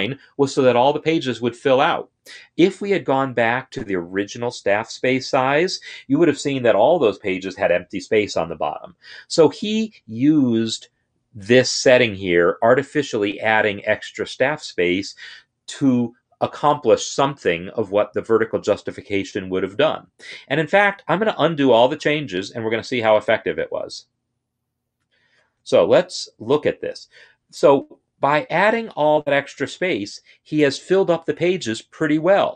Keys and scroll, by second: 21.8 ctrl+z, 22.3 ctrl+z, 22.3-24.7 ctrl+z.